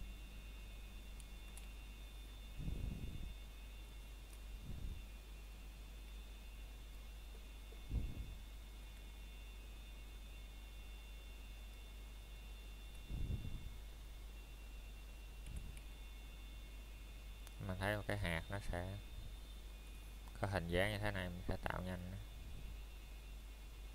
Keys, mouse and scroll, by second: 2.2 KP_Enter, 5.5 shift+c, 5.9-6.4 scroll up 1, 6.7 middle click, 7.1-7.5 scroll up 1, 7.5 middle click, 8.4 scroll up 1, 10.1 Tab, 11.0 click, 13.3 s, 16.4 click, 16.8-17.5 scroll up 1, 17.6 shift+middle click, 18.1-18.6 scroll up 1, 20.7-21.6 typing, 23.1 click, 23.4-23.8 scroll down 1, 23.8 middle click.